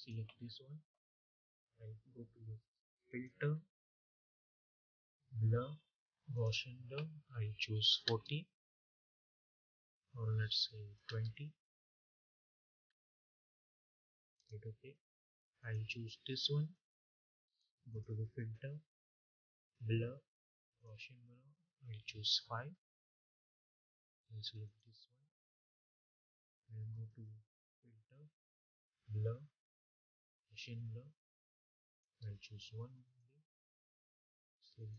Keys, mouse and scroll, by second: 2.9 click, 6.2 click, 10.5 click, 14.0 click, 14.2 click, 17.8 click, 20.6 click, 23.0 click, 27.3 click, 29.8-32.9 drag.